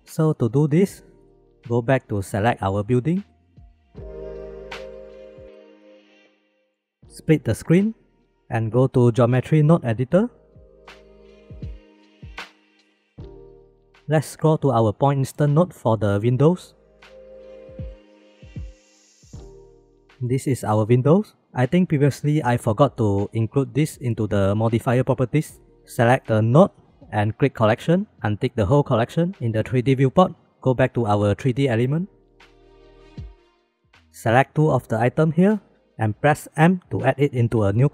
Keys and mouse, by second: 0.9 click, 1.3 click, 1.3 middle click, 1.5 click, 1.8 shift+middle drag, 2.7 shift+middle drag, 4.6 click, 5.2 click, 6.7 click, 7.4 click, 7.8 click, 8.0 click, 8.2 click, 11.0 middle click, 11.4 middle click, 13.0 click, 13.7-15.5 middle drag, 15.8 middle click, 16.7 middle click, 18.3 click, 19.4 m, 19.8 m, 20.0-21.3 drag, 25.7 click, 26.3 click, 27.1 click, 28.9 click, 30.7-31.2 middle drag, 31.4-31.8 shift+middle drag, 32.3 shift+middle drag, 32.6 shift+b, 35.3 shift+click, 36.5 m.